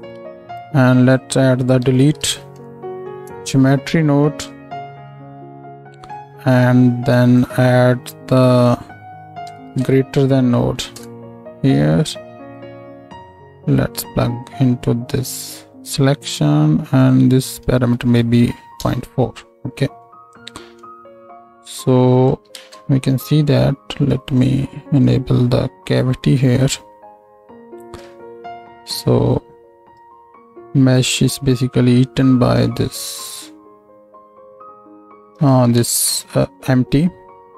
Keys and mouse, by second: 4.5 middle click, 5.0 alt+shift+click, 5.1 alt+shift+middle click, 5.5-12.5 drag, 12.5 middle click, 13.4-28.0 drag, 22.5 ctrl+space, 35.8 ctrl+space.